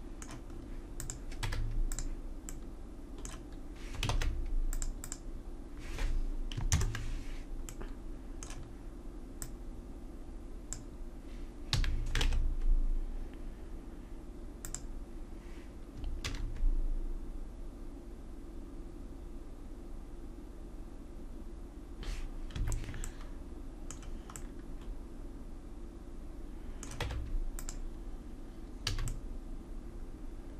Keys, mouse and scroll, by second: 1.0-2.5 drag, 1.4 Tab, 4.1 ctrl+Tab, 5.0 click, 6.7 ctrl+KP_Add, 9.3-11.2 drag, 11.7 a, 12.2 ctrl+Tab, 16.3 ctrl+r, 27.0 Tab, 27.7 Tab, 28.9 a.